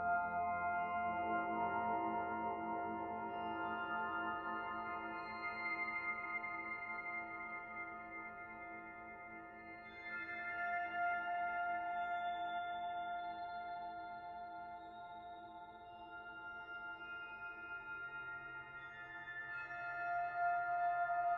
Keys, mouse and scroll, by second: 4.6 m, 8.2 e, 11.8 click, 15.8 click, 18.0-18.4 scroll up 4, 18.6 shift+middle click, 19.3 middle click, 20.0-20.6 scroll up 2, 20.6 middle click.